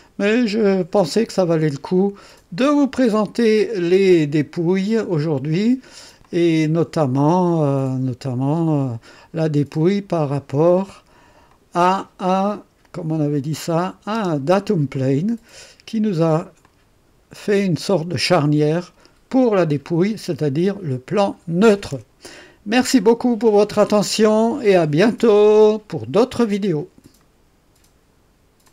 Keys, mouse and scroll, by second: 0.2-0.6 scroll up 1, 2.6 click, 6.2 click, 7.5 click, 11.4 click, 13.7 click, 14.1 space, 14.9-16.3 drag, 16.6 click, 17.4-18.9 drag, 27.2 right click, 28.6 click.